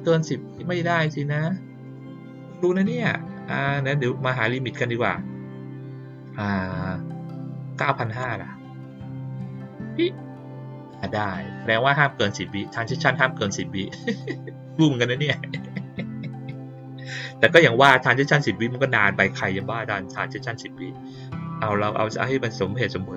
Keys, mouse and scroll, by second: 0.9 click, 1.3 click, 1.8 click, 11.0 click, 12.4 click.